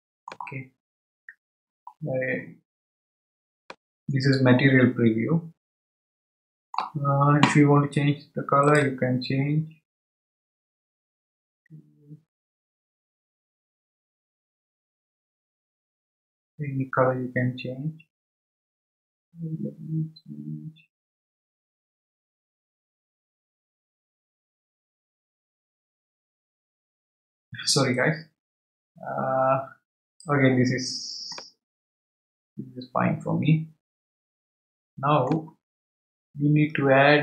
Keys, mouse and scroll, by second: 3.7-6.7 middle drag, 8.6 click, 31.3-34.4 middle drag.